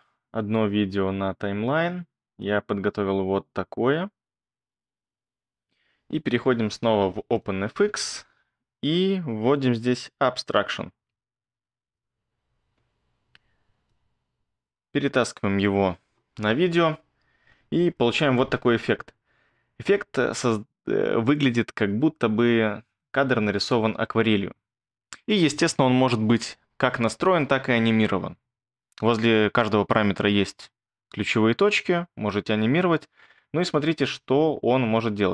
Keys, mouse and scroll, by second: 10.8-12.1 typing.